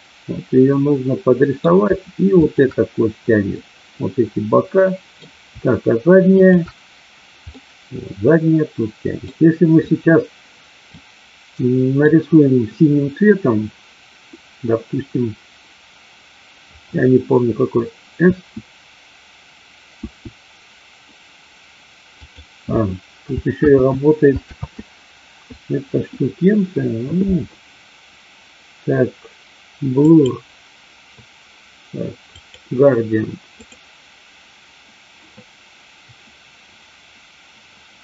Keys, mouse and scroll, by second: 2.4 shift+click, 3.5-5.2 middle drag, 6.3 shift+click, 7.5-9.2 middle drag, 10.9-12.0 middle drag, 18.2 s, 19.8 s, 22.2 click, 23.8 ctrl+z, 24.5 ctrl+z, 29.9 click, 32.4 click.